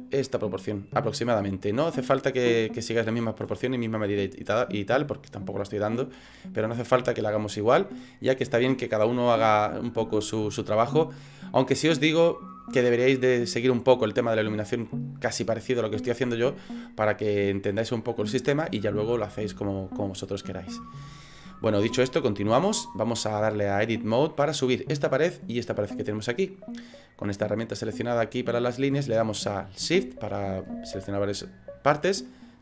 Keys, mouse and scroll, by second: 1.8 middle click, 2.8 middle click, 21.5 shift+middle click, 22.0 middle click, 23.7 click, 25.9 middle click, 28.0 click.